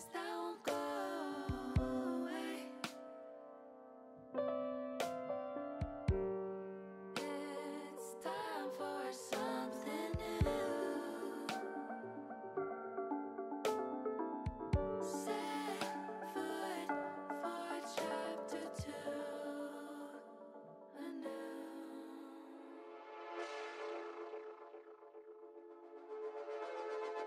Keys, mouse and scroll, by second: 1.3-3.8 drag, 4.6 click, 5.3-7.7 drag, 9.1-10.2 drag, 10.9-12.1 drag, 14.1 shift+click, 14.8-16.0 drag, 17.4 shift+click, 18.0-21.5 drag, 22.9 click, 23.6-25.7 drag.